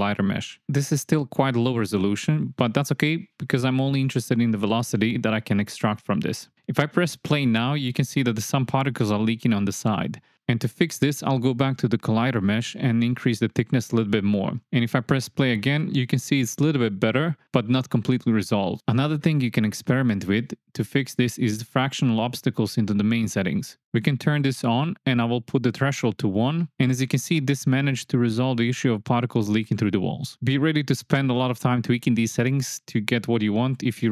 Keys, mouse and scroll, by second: 1.3 space, 1.5 drag, 2.4 drag, 3.6 shift+Left, 4.6 click, 7.5 click, 9.2 click, 10.7 click, 12.2-14.7 drag, 15.1 shift+Left, 16.0 space, 19.7 space, 19.8 click, 20.8 click, 22.0-25.0 drag, 25.6 click, 27.1 shift+Left, 27.4 space, 32.7 space, 33.8 click.